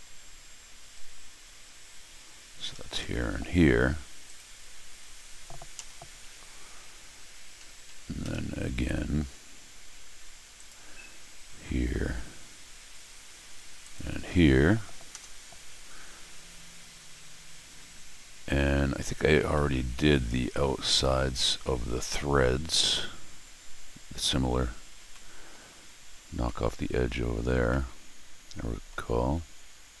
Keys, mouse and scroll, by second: 1.0 scroll down 1, 2.0 scroll down 1, 2.3 scroll up 1, 2.7 middle click, 3.0 middle click, 4.2 click, 7.6 Escape, 10.5 click, 11.0-11.7 scroll down 6, 11.8-12.5 scroll up 6, 13.8 click, 15.1 Return, 16.4-17.2 scroll down 4, 17.2-18.7 scroll down 6, 19.4-20.5 middle drag, 22.4 scroll up 1, 24.9 scroll down 1, 25.1 middle click, 26.4 middle click, 27.7-28.9 middle drag.